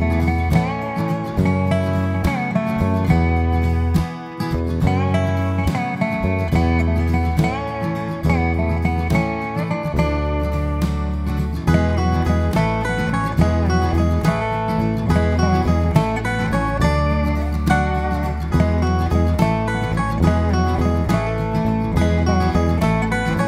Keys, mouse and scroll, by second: 0.6 click, 1.8 click, 2.6 click, 3.3 click, 3.8 click, 4.3 click, 4.8 click, 5.5 click, 6.3 click, 6.8 click, 7.5 click, 8.1 click, 8.9 click, 9.6 click, 10.3 click, 10.8 click, 11.2 click, 11.6 click, 12.0 click, 12.6 click, 13.1-13.9 scroll down 1, 13.9 click, 14.5 click, 15.0-15.3 scroll down 3, 15.3 middle click, 17.5-18.1 scroll up 4, 18.6 click, 19.8 click, 21.0 click, 21.6 click, 22.0 click, 22.6 click, 23.0 click.